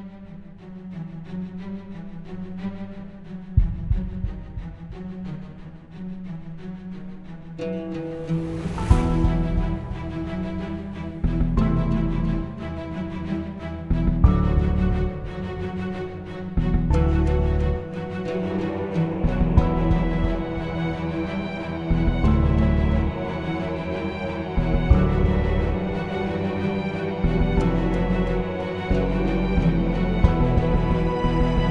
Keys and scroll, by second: 3.8 Delete, 9.3-10.9 typing, 11.7 shift+Return, 24.4-26.9 typing, 28.6-30.5 typing.